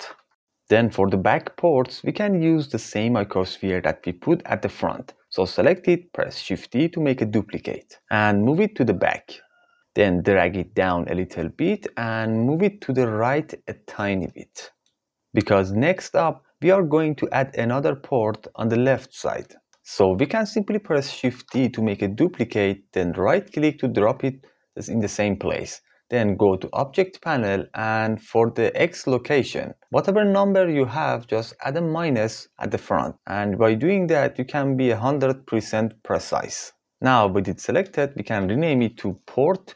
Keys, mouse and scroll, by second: 5.5 shift+d, 6.5 click, 9.1 click, 10.0 g, 10.2 click, 11.9 click, 13.1 g, 13.3 click, 16.1 click, 19.7 x, 20.8 shift+d, 22.9 click, 29.8-33.5 drag, 37.8 F2.